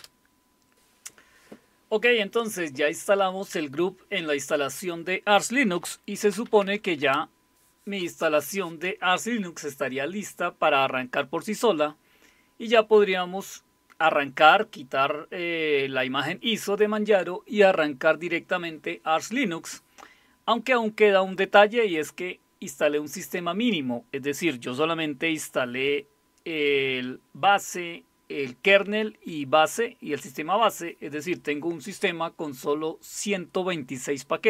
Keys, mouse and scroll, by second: 0.0-0.6 typing, 6.1-7.2 typing.